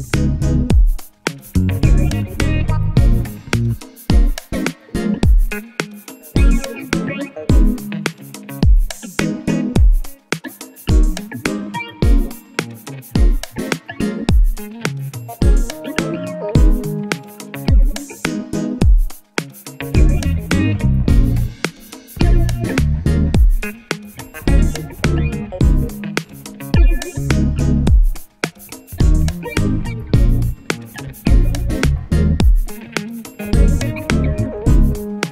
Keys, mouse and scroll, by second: 2.0 alt+scroll down 1, 2.6-3.5 scroll up 1, 3.5-8.9 drag, 10.2 Down, 11.2 shift+Down, 11.9-16.9 drag, 19.5-20.9 drag, 22.2 KP_0, 22.8-34.9 drag, 35.0 shift+Down, 35.2 shift+Down.